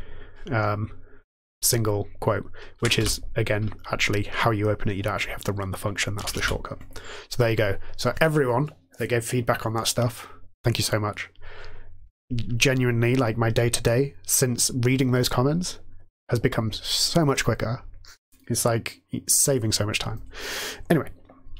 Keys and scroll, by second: 2.7 ctrl+c, 6.1 ctrl+c, 6.3 '.